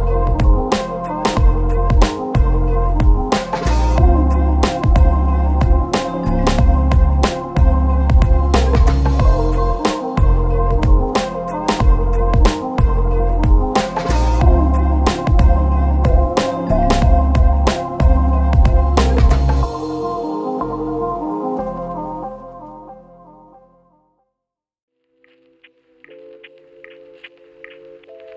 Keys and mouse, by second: 0.1 Tab, 0.1 alt+click, 1.2 alt+shift+click, 1.4 ctrl+x, 1.6 Tab, 1.7 click, 1.9 KP_Divide, 2.1 middle click, 2.1 a, 2.3 a, 2.6 KP_Divide, 3.7 Tab, 4.3 Tab, 4.3 ctrl+middle click, 4.6 ctrl+KP_Add, 5.2 shift+middle click, 5.2 shift+KP_7, 5.3 shift+z, 5.5 c, 6.8 shift+middle click, 7.0 c, 7.7 c, 8.2 shift+middle click, 8.5 c, 10.0 shift+click, 10.3 Tab, 10.4 x, 10.6 c, 11.0 ctrl+z, 11.1-12.3 middle drag, 11.7 shift+z, 12.3 shift+click, 12.5 shift+middle click, 13.0 ctrl+shift+middle click, 13.8 ctrl+middle click, 14.0 shift+middle click, 14.8 x, 15.0-17.3 shift+middle drag, 15.4 Tab, 16.0 f, 16.7 Tab, 17.1 Tab, 17.3 ctrl+x, 17.3 click, 17.5 ctrl+x, 17.5-19.4 ctrl+middle drag, 17.5 ctrl+x, 17.7 ctrl+x, 17.9 ctrl+x, 18.3 ctrl+x, 18.8 ctrl+x, 18.8-19.7 ctrl+x, 19.4 click, 19.7 middle click, 20.0 click, 20.3 ctrl+x, 20.6 ctrl+x, 20.6 click, 21.1 Tab, 21.2 KP_Divide, 21.4 a, 21.6-22.6 middle drag, 22.8 middle click, 22.8 KP_1, 23.2 right click, 23.9 shift+middle click, 24.1-27.6 typing, 24.8 shift+middle click, 25.1 shift+middle click, 25.6 shift+middle click, 26.1 click, 26.9 click, 26.9 middle click, 26.9 right click.